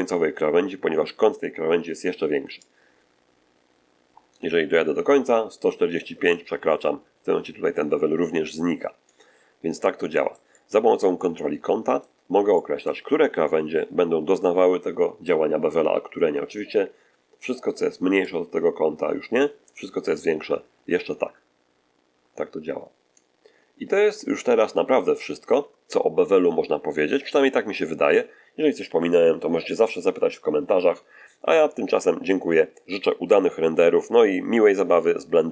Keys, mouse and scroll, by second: 2.5-9.2 drag, 9.7-12.1 middle drag, 12.4 middle click, 18.2-23.3 drag, 28.8 1.